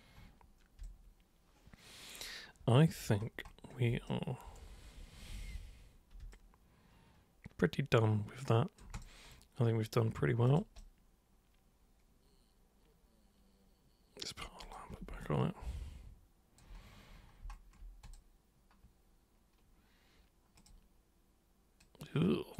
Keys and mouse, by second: 0.8-3.0 alt+super+drag, 4.0 super+right click, 5.3 ctrl+super+1, 6.3-8.8 alt+super+drag, 8.9 super+click, 10.5 super+click, 10.8-14.3 super+right drag, 14.6 super+click, 15.2-16.6 alt+super+drag, 18.0 super+click, 20.6 super+click, 21.8 super+click.